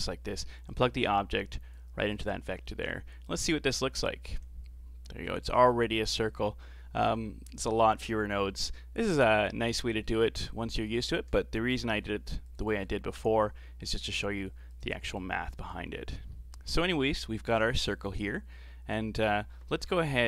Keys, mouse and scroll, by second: 0.7 click, 2.1-2.8 scroll up 7, 2.8-3.4 middle drag, 3.4 ctrl+shift+click, 5.7-7.2 scroll down 15, 7.2-7.8 middle drag, 7.8-8.5 scroll down 2, 8.5 g, 9.7-10.4 middle drag, 10.4 click, 11.7 g, 12.9-13.9 scroll up 5, 13.9 click, 15.2 click, 16.0-17.0 scroll up 9, 16.3 middle click, 17.0-19.7 middle drag, 19.7 shift+a.